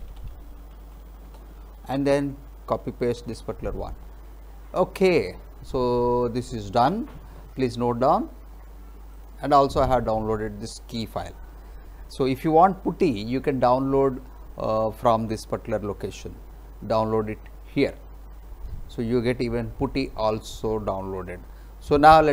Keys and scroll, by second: 0.0-1.4 typing, 3.2 ctrl+v.